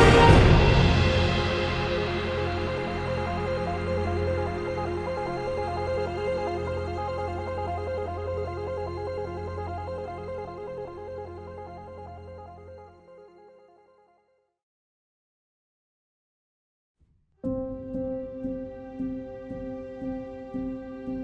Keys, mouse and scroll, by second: 0.0 e, 3.7 b, 3.8 ctrl+z, 11.0 ctrl+z, 16.5 ctrl+z, 17.1-19.5 typing, 17.9 click.